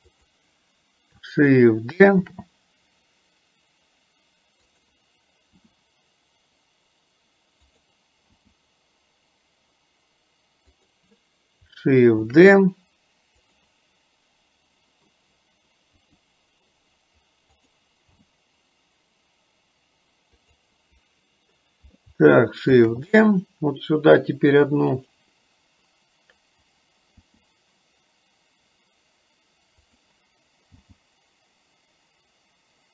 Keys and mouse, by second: 2.3 shift+d, 5.7 r, 8.6 g, 12.3 shift+d, 16.1 r, 18.3 g, 22.9 shift+d, 27.3 r.